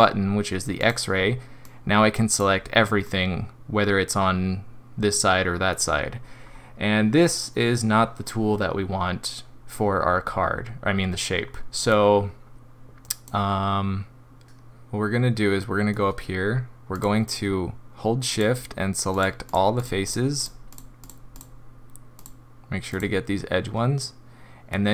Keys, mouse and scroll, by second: 0.8 click, 1.6 click, 3.0 middle click, 3.5 middle click, 6.4-7.0 scroll up 4, 11.4 scroll down 2, 11.9 click, 14.4 middle click, 15.1 middle click, 16.9 click, 18.3 shift+click, 19.1 click, 19.5 click, 19.8 shift+click, 20.0 shift+click, 20.4 shift+click, 20.7 shift+click, 21.0 shift+click, 21.4 shift+click, 22.1 shift+click, 22.9 shift+click.